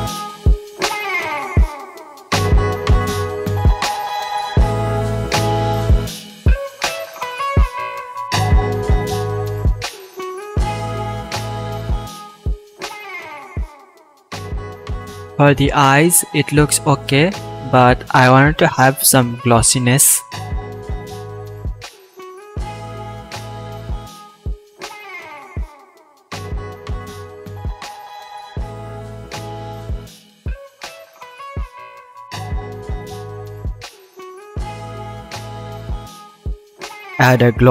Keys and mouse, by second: 3.1-5.5 drag, 8.6 alt+a, 10.5-13.4 middle drag, 13.4 shift+click, 13.9 middle click, 13.9-16.8 drag, 19.2 BackSpace, 24.5-27.5 shift+middle drag, 27.5-28.0 drag, 28.0 middle click, 28.1-29.6 drag, 37.5 shift+a.